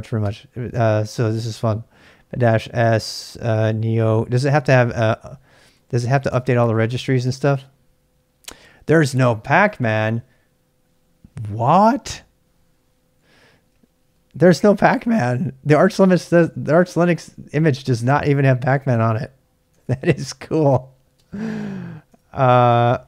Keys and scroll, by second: 0.0-0.7 typing, 3.4-6.5 typing, 13.4-14.6 typing, 16.7-20.0 typing, 21.1-23.0 typing.